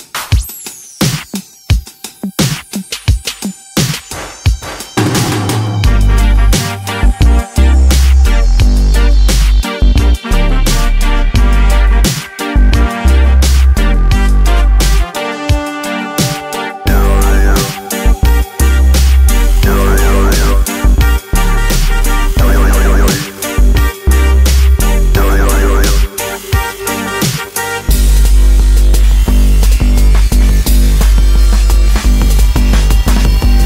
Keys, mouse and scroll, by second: 3.0 click, 4.1 a, 4.9 alt+shift+click, 6.6 s, 8.0 click, 9.2 a, 10.0 alt+shift+click, 11.2 s, 14.7 Escape, 15.5 Delete, 16.8 click, 18.1 alt+shift+click, 19.3 s, 20.9 click, 22.2 s, 23.6 click, 24.0 e, 24.3 z, 26.7 click, 27.6 e, 27.9 z, 28.5 click, 29.1 s, 30.6 click, 31.4 e, 31.6 z.